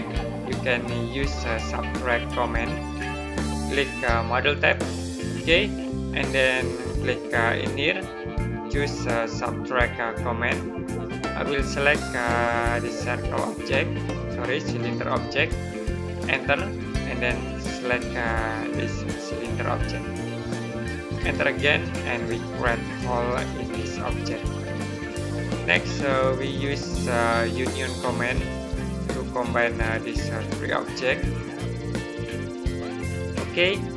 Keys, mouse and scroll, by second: 4.4 click, 7.5 click, 10.3 click, 16.0 right click, 18.5 click, 21.0 right click, 27.4 click, 33.1 right click.